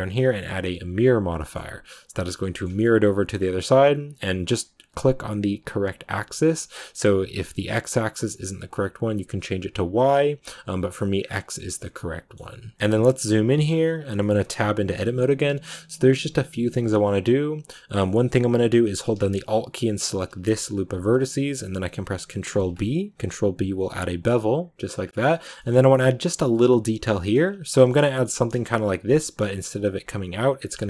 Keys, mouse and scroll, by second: 1.2 middle click, 1.5-2.3 scroll up 1, 2.3-4.7 middle drag, 4.7-9.2 drag, 10.1 click, 11.1 scroll down 2, 11.7-12.7 middle drag, 12.7 scroll down 1, 12.8 middle click, 13.0-13.9 scroll up 3, 13.4 middle click, 13.9 right click, 14.1 shift+middle click, 14.4-15.9 scroll up 2, 14.5 Tab, 14.8 middle click, 15.9 a, 16.8-20.0 scroll up 2, 20.0-25.2 alt+right drag, 25.2-27.4 shift+middle drag, 27.4 scroll down 2, 27.6-30.8 shift+middle drag.